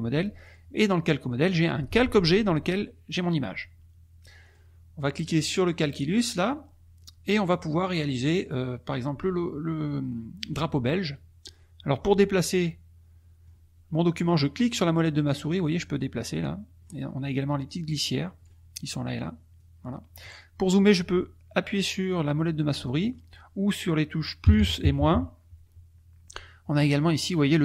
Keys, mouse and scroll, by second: 0.4 click, 1.4 click, 4.4-6.6 drag, 7.7 middle click, 12.0-13.6 middle drag, 14.5-17.0 drag, 17.7-18.6 drag, 19.5-20.3 drag, 22.4-24.5 middle drag, 24.4 KP_Add, 24.8 KP_Subtract.